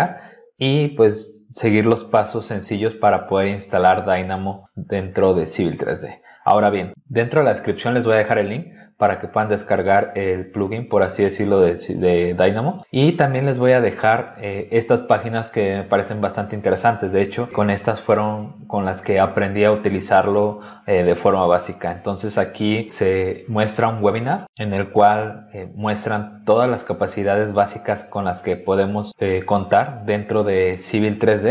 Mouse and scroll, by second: 12.8 click, 13.6-14.6 scroll up 6, 21.5-22.9 scroll down 8, 26.8 scroll down 2, 27.4-28.4 scroll down 6, 28.9 scroll down 2, 29.5-30.1 scroll down 4, 30.8 scroll down 2, 31.4 scroll down 2.